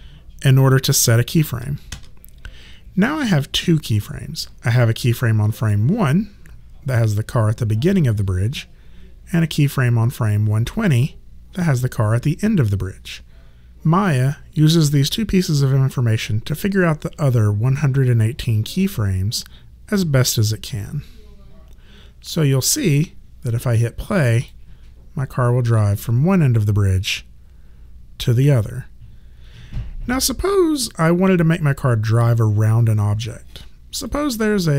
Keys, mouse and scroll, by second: 1.9 s, 5.6 click, 10.7 click, 18.4 click, 24.3 click, 30.9 click, 34.1 click.